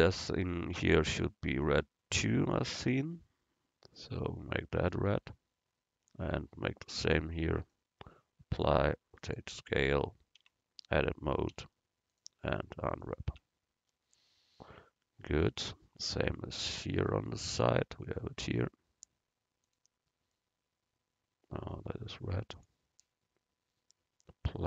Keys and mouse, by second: 0.0-2.7 drag, 1.6 right click, 10.5 Tab, 11.6 u, 13.4 Tab, 17.3 middle click, 18.2-21.3 right drag, 19.7-21.7 drag.